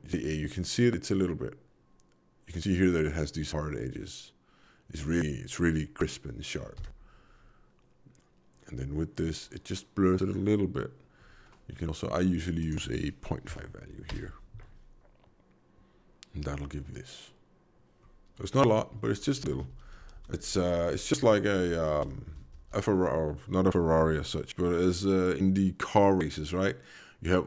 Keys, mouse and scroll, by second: 6.7 m, 12.6 click, 19.1 alt+v, 19.3 alt+v, 21.9 alt+v.